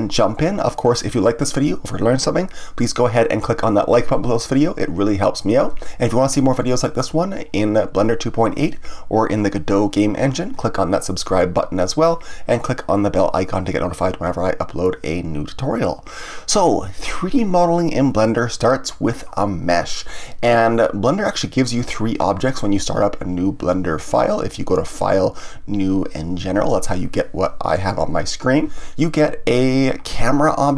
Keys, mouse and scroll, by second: 24.9-28.0 drag, 30.0 click.